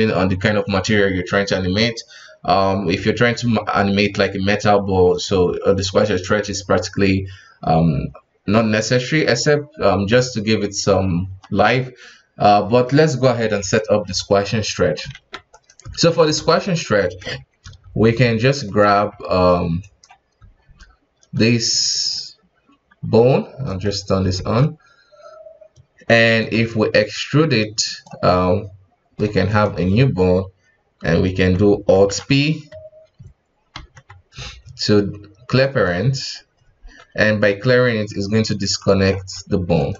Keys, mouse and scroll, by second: 15.1 alt+a, 15.5 right click, 15.8 Tab, 16.3 alt+a, 16.6 right click, 17.2-19.1 typing, 20.4 space, 20.6 space, 23.6 click, 24.2 space, 26.3 e, 26.9-28.3 drag, 28.3-29.5 middle drag, 29.5 right click, 33.7 alt+p, 37.7-38.8 scroll up 2, 38.8 right click, 39.1 g.